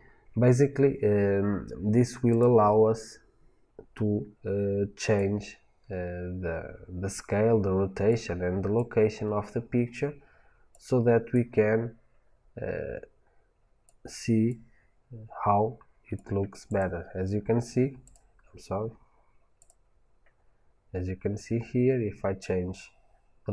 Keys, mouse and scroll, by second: 1.3 click, 2.2 click, 3.0-3.3 scroll up 1, 5.0-16.8 drag, 17.9 drag, 18.4-18.7 scroll down 1, 19.5 click, 20.2-20.5 scroll up 1, 22.3-23.5 drag.